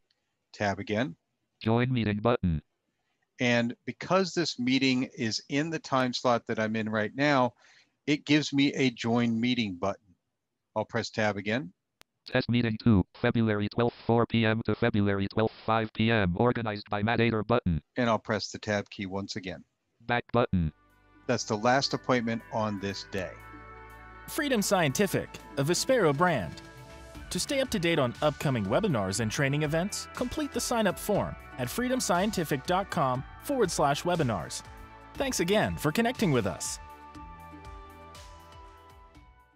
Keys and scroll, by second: 0.3 Tab, 10.8 Tab, 18.1 Tab.